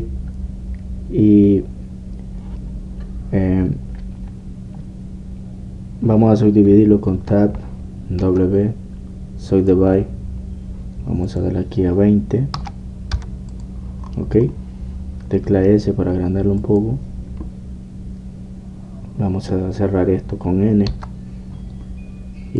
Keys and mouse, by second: 8.1 Tab, 12.2-13.9 drag, 14.0-17.9 middle drag, 17.9-19.6 drag, 21.9 n.